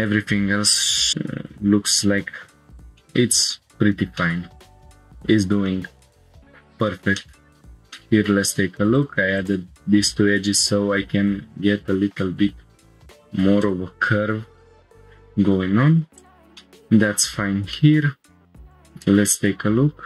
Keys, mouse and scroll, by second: 1.5 click, 3.0 click, 3.5 middle click, 3.7 scroll up 2, 4.2 shift+middle click, 4.6 middle click, 5.7 middle click, 6.7 scroll down 1, 7.2 middle click, 7.6 click, 7.9 shift+middle click, 8.4 scroll up 2, 8.9 click, 9.4 shift+click, 10.9 g, 11.3 y, 13.8 shift+click, 14.8-16.1 scroll down 1, 16.1 click, 16.4 shift+click, 16.4 shift+middle click, 16.4 scroll up 1, 16.6 click, 16.9 middle click, 17.4 scroll up 1, 17.7 shift+middle click, 18.1 scroll down 2.